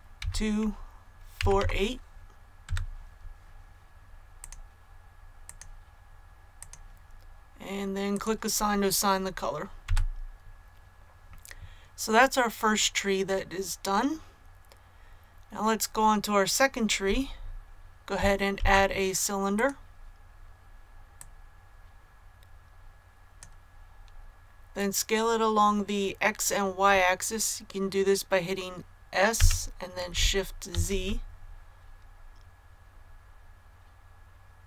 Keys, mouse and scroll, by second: 0.1 KP_2, 1.3 KP_4, 1.5 KP_8, 4.3 click, 9.8 a, 14.9 scroll down 1, 18.5 shift+a, 19.4 click, 24.2 click, 29.3 s, 30.6 shift+z.